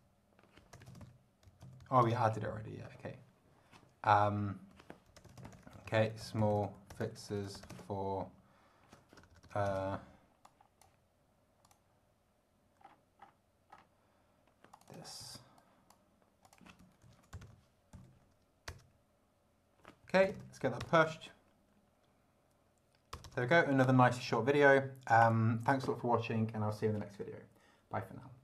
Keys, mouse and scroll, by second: 0.0-1.6 typing, 1.8 Right, 2.0 Return, 4.4-6.7 typing, 6.7 ctrl+f, 6.9 ctrl+i, 7.0 ctrl+x, 7.1 ctrl+e, 7.3 ctrl+s, 7.3 ctrl+space, 7.5 ctrl+t, 7.6 ctrl+o, 7.7 ctrl+space, 9.2-10.2 typing, 10.4 click, 11.6 click, 12.8-13.4 scroll up 2, 13.7 scroll up 1, 14.7 click, 15.2 ctrl+c, 15.6 ctrl+click, 16.0 click, 16.4 ctrl+click, 17.0 ctrl+shift+v, 17.3 ctrl+shift+BackSpace, 17.4 Right, 17.7-18.5 typing, 18.7 Return, 19.8-20.8 typing, 23.1 Return, 23.4 ctrl+d, 25.2 click.